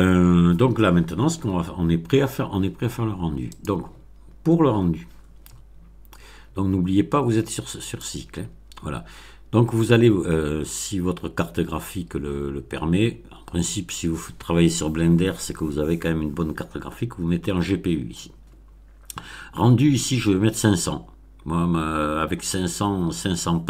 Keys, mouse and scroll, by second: 3.4 click, 7.8 click.